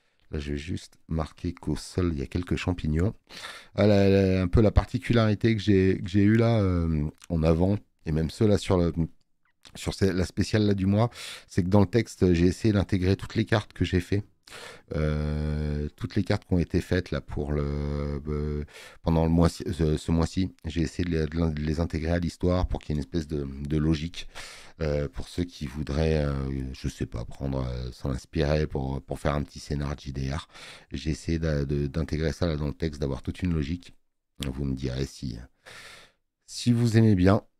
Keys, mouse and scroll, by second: 9.2 space, 25.4 click.